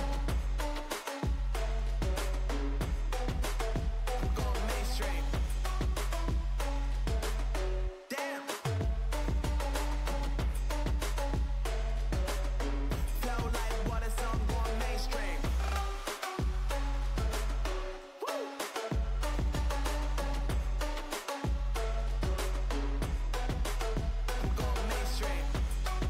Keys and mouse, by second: 0.8 Tab, 1.2 Tab, 1.5 z, 2.8 ctrl+e, 5.1 z, 5.7 Tab, 7.1-8.4 drag, 8.6-13.1 drag, 15.1-18.2 drag, 18.3 z, 19.0-21.7 middle drag, 21.9 middle click, 22.4-23.7 drag, 23.7 z, 24.6 z, 25.4 Tab.